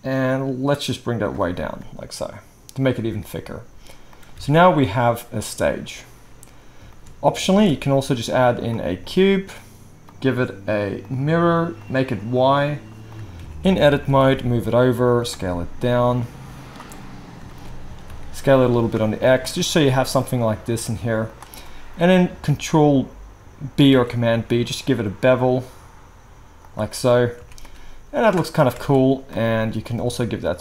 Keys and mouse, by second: 4.4 alt+a, 7.5 shift+a, 11.8 click, 12.4-19.5 drag, 13.3 Tab, 14.0 g, 15.3 s, 17.8 s, 19.5 g, 23.9 ctrl+b, 27.0-27.6 right drag, 27.4 Tab, 28.8 alt+a, 29.3 click.